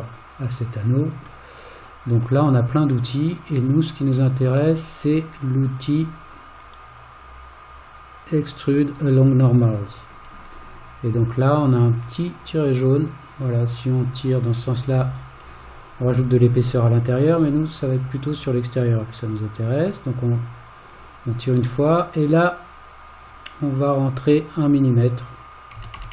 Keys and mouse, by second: 3.6 click, 4.6 click, 5.2 click, 5.6 click, 6.3-9.6 drag, 12.0-21.6 drag, 23.2-26.1 drag, 26.0 BackSpace.